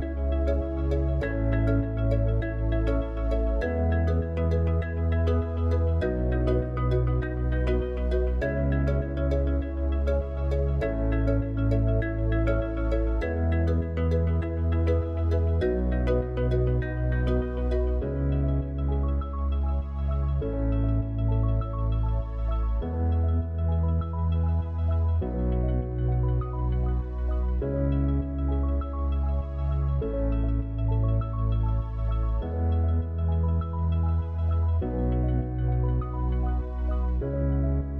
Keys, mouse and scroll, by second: 1.0 click, 4.4-4.8 middle drag, 5.4-7.6 middle drag, 7.6 click, 9.1 click, 10.0 g, 13.0-19.3 drag, 20.1-21.6 drag, 25.6 click, 27.3 drag.